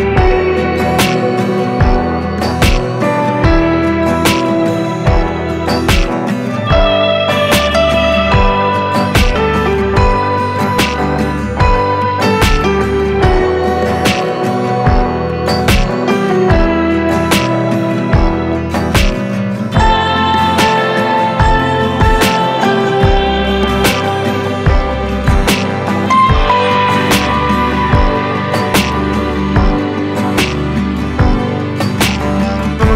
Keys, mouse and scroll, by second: 1.0 click, 1.0-3.1 drag, 7.6-13.5 drag, 13.5-16.4 drag, 18.9-26.5 drag, 26.5 click.